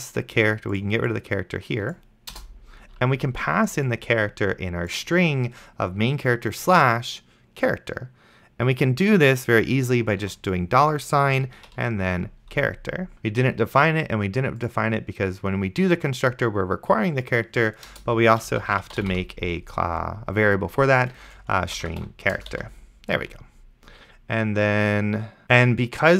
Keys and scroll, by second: 2.6 BackSpace, 10.5 shift+4, 11.9 ctrl+v, 18.2 Return, 18.5-19.7 typing, 21.2-22.6 typing.